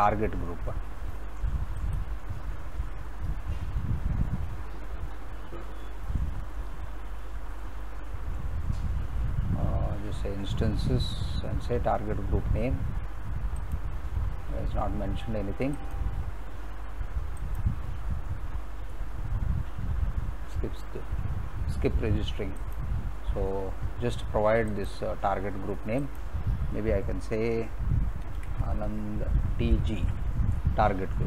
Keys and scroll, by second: 28.0-30.5 typing.